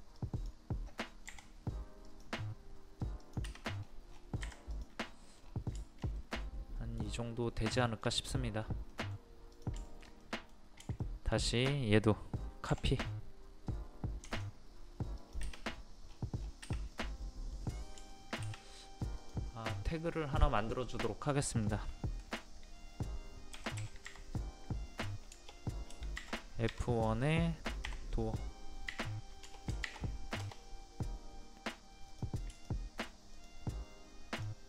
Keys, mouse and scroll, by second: 1.3 p, 2.1 click, 3.8-4.1 scroll down 1, 4.5 Escape, 4.8 click, 5.1 middle click, 5.4 scroll down 1, 5.8-7.4 shift+middle drag, 7.9 shift+middle click, 8.3-8.7 scroll up 1, 8.9 middle click, 9.6 click, 9.9 shift+middle click, 10.8 scroll up 1, 10.9 scroll down 1, 11.6-12.8 scroll up 1, 12.8 m, 14.3 ctrl+click, 15.2 click, 15.7-16.0 scroll down 1, 16.9 click, 17.2 middle click, 17.6-17.9 scroll down 1, 18.1 shift+middle click, 19.2 click, 23.5 KP_1, 23.8 KP_Decimal, 25.3 BackSpace, 28.9 d, 29.5 BackSpace, 30.4 Return, 32.1 click, 32.6 shift+click, 33.3 shift+click, 34.4 shift+click.